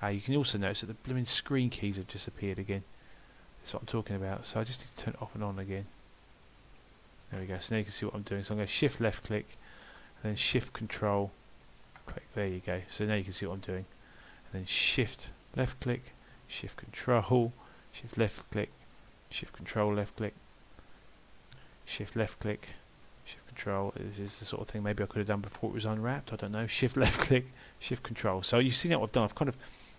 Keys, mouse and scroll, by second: 8.7 shift+click, 11.6 ctrl+shift+click, 12.9 middle click, 15.6 shift+click, 17.1 ctrl+shift+click, 18.0 shift+click, 19.5 ctrl+shift+click, 20.3 middle click, 22.0 shift+click, 22.5 middle click, 23.9 ctrl+shift+click, 26.8 shift+click, 28.0 ctrl+shift+click, 28.8 middle click.